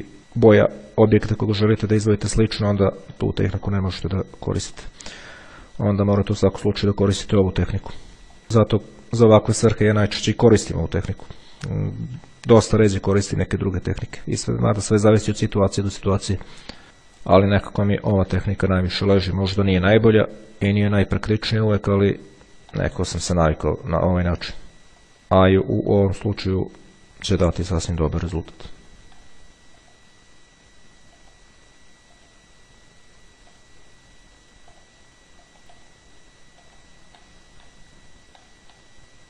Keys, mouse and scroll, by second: 0.2 middle click, 0.9 click, 2.5 click, 5.0 click, 6.3 click, 8.9 click, 10.2 click, 11.3 click, 11.9 right click, 14.4 click, 15.6 click, 16.4 click, 17.8 click, 19.0 click, 20.0 middle click, 22.2 click, 23.0 middle click, 26.6 click, 28.1 click, 29.8 click, 31.4 click, 32.2 click, 33.6 click, 35.0 click, 36.0 click, 36.8 click, 37.4 middle click, 38.6 click.